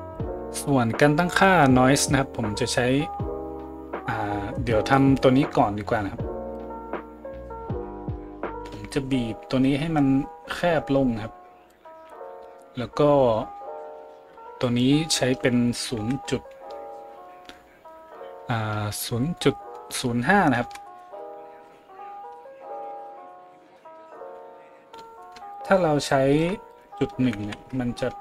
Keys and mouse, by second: 6.7-28.2 drag.